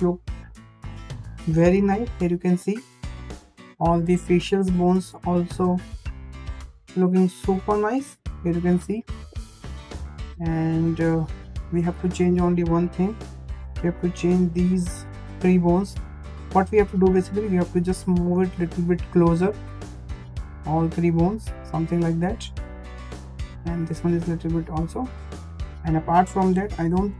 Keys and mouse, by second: 0.1 middle click, 1.1 shift+middle click, 1.8 shift+middle click, 2.2 middle click, 2.7 shift+middle click, 4.7 shift+middle click, 5.3 shift+middle click, 6.6 shift+middle click, 7.0-8.5 middle drag, 10.0 shift+middle click, 11.3 `, 12.6 shift+middle click, 13.8 click, 14.4 middle click, 15.5 middle click, 16.0 shift+middle click, 16.8 click, 18.9 click, 20.0 click, 20.8-21.9 drag, 22.6 click, 23.9 click, 25.1 click, 25.9 `, 26.1 `.